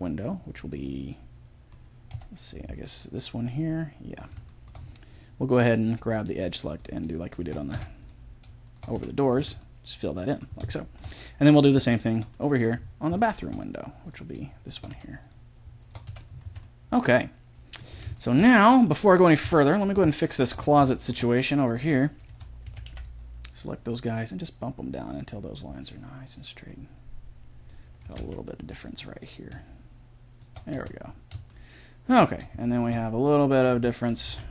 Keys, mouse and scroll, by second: 0.0-1.4 middle drag, 1.6 middle click, 2.1 KP_7, 3.2 middle click, 3.5 middle click, 3.7 middle click, 5.8 click, 6.7-7.7 middle drag, 7.7 f, 8.9 f, 9.4 a, 12.9-14.0 middle drag, 14.0-16.5 right drag, 14.9 f, 16.1 f, 16.5 a, 19.4 KP_7, 20.6 middle click, 21.0 middle click, 21.8 right click, 22.3 a, 22.7 a, 22.9 b, 23.6 click, 28.1 a, 29.5 b, 30.8 a, 32.3-34.5 middle drag, 33.7 a, 34.3 a.